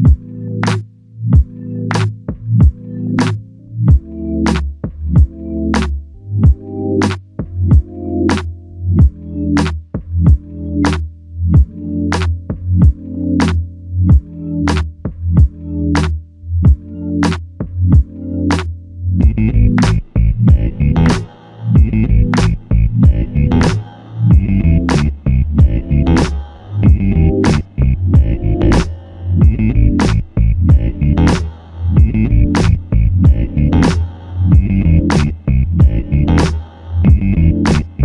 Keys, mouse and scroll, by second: 1.3 double click, 3.3 alt+click, 4.8 shift+click, 7.0 shift+click, 11.0 shift+click, 14.4 shift+click, 18.2 shift+click, 19.4 shift+click, 21.2 ctrl+alt+click, 22.0 alt+click, 23.5 ctrl+alt+click, 31.4 ctrl+i, 34.2 alt+click.